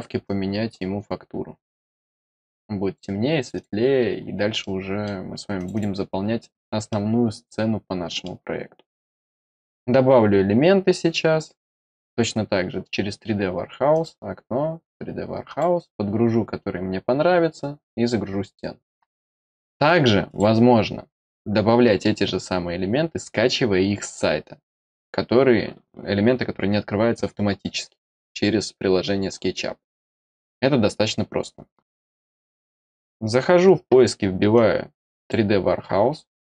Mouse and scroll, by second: 0.2-2.9 drag, 3.3 click, 3.5 click, 4.5-5.0 middle drag, 5.5 click, 5.7 click, 6.1 middle click, 6.4-6.8 scroll down 2, 6.8-8.2 middle drag, 11.5 scroll down 1, 13.9 click, 15.4 click, 20.2 click, 34.5 click.